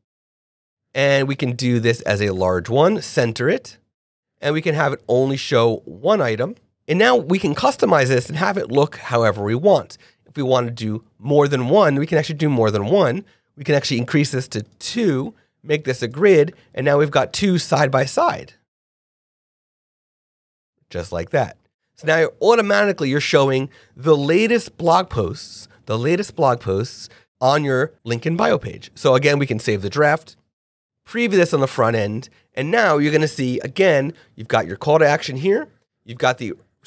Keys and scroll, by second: 6.1 super+a, 6.4 super+i.